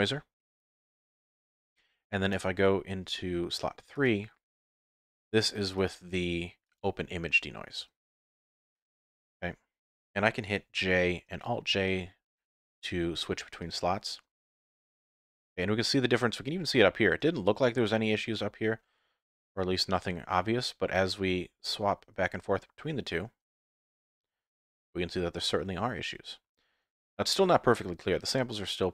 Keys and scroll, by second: 0.7 F11, 7.8 F11.